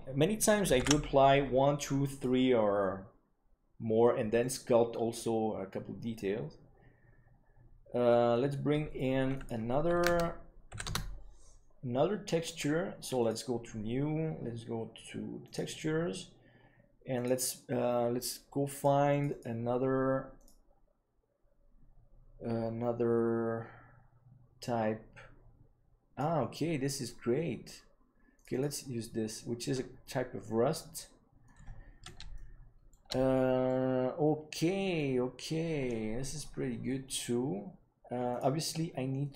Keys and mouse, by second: 1.6 ctrl+s, 2.0-6.7 drag, 9.5-12.7 drag, 13.1-15.1 drag, 15.4 click, 17.1 click, 31.4-32.0 middle drag, 32.3-32.9 shift+middle drag, 33.6-34.9 middle drag, 39.2-39.3 middle drag.